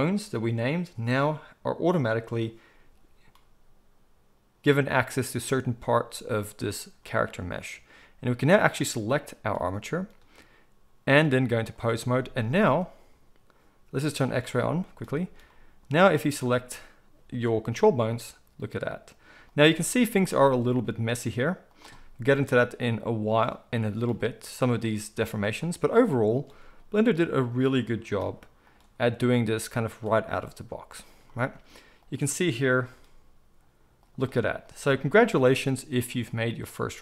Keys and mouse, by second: 8.8-11.1 middle drag, 11.1-16.3 drag, 16.3-23.3 middle drag, 17.7 g, 20.3 g, 23.3 click, 23.5-26.3 middle drag, 24.1 g, 26.3 click, 26.4-37.0 middle drag, 26.4 g, 28.2 r, 32.7 g, 35.4 r, 36.9 r.